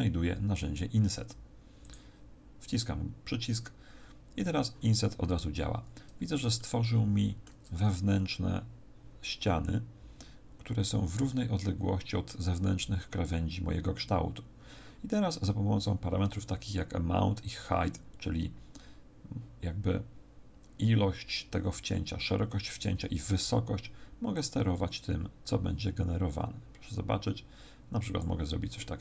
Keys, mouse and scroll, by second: 0.1-0.4 scroll down 1, 1.8 click, 5.3-6.5 scroll up 3, 6.5 shift+middle click, 24.3 click.